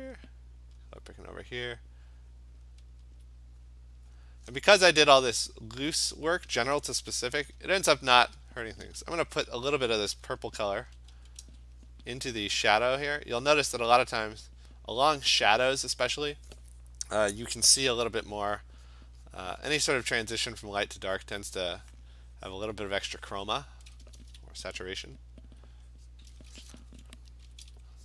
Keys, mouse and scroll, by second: 0.2 click, 0.9 click, 2.6 alt+click, 3.2 alt+click, 3.7 alt+click, 4.2 click, 4.8 alt+click, 8.5 alt+click, 8.7 alt+click, 10.5-11.4 typing, 11.9 click, 12.2 click, 12.9 click, 13.5 alt+click, 18.9 click, 19.3 click, 19.7 click, 20.6 click, 21.0 click, 21.2 click, 21.7 click, 22.1 click, 22.9 click, 23.7 click, 25.4 alt+click, 26.1 click, 26.9 ], 27.5 ], 27.7 ].